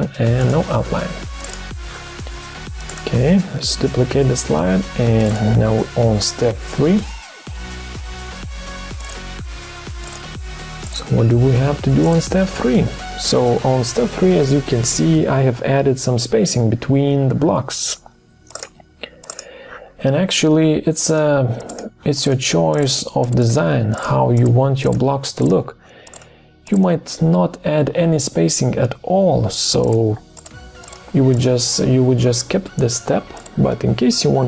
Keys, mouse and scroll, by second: 3.3 ctrl+d, 7.5 BackSpace, 7.9 BackSpace, 8.1 BackSpace.